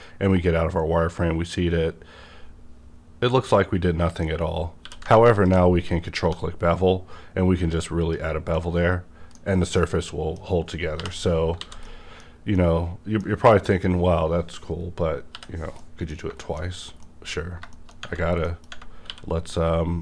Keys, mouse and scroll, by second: 4.3 scroll up 1, 4.8 q, 5.3 ctrl+click, 6.2 1, 6.5 scroll up 1, 8.0 click, 8.3 scroll down 1, 8.5 middle click, 9.5-9.8 scroll down 1, 11.0 /, 11.4 scroll down 1, 11.4 /, 11.6 alt+a, 11.8 middle click, 12.3 scroll down 1, 12.5-15.3 middle drag, 13.7 click, 13.7 click, 15.3 /, 15.8 middle click, 16.6 shift+middle click, 16.7 scroll up 1, 17.0 middle click, 17.7 shift+middle click, 18.4 middle click, 18.8 middle click, 19.0 q.